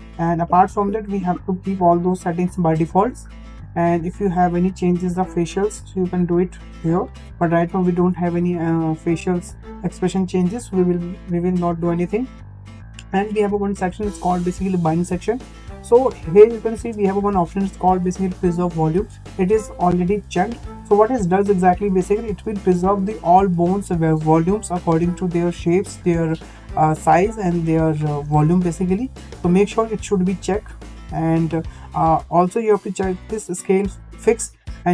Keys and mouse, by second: 4.1 click, 7.6 click, 33.7 click.